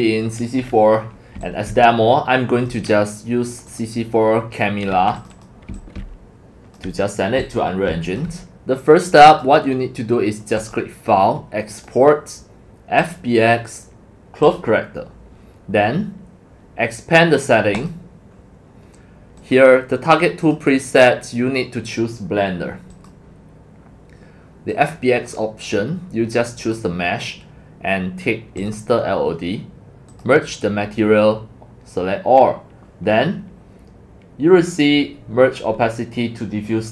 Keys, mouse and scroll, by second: 0.8 middle click, 0.8-1.1 scroll down 4, 1.3-3.0 typing, 1.4 click, 3.5 click, 3.7 click, 4.9-7.9 typing, 5.2 click, 5.3 click, 8.1 click, 8.8-9.4 drag, 10.6 click, 11.7 click, 13.0 click, 14.4 click, 17.8 click, 18.5 click, 19.4 click, 20.4 click, 20.9 click, 22.9 click, 24.7 click, 26.6 click, 28.6 click, 30.1 click, 31.2 scroll down 1.